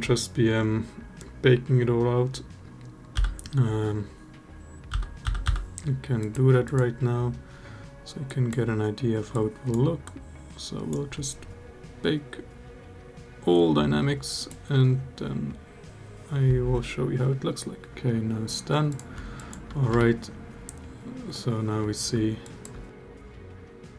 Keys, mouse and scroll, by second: 2.9 n, 4.7 n, 5.0 n, 5.2 n, 6.4 click, 8.1 click, 9.1 click, 9.8 drag, 14.1-18.0 drag, 19.1 alt+drag, 19.7 space, 22.2 alt+drag.